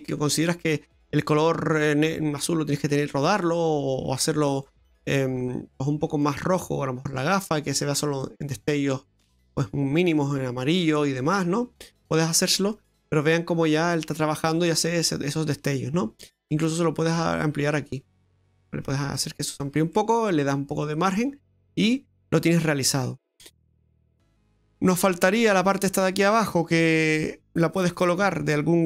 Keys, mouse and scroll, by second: 1.1-2.3 scroll up 6, 2.7 click, 5.5 click, 7.7 click, 8.6 click, 9.6 middle click, 13.9-14.4 scroll down 4, 14.4 middle click, 15.2-15.9 scroll up 6, 17.2 click, 20.0 middle click, 21.4-21.9 scroll down 5, 21.9 middle click, 23.3-24.0 scroll up 4, 24.0 middle click, 26.6 right click.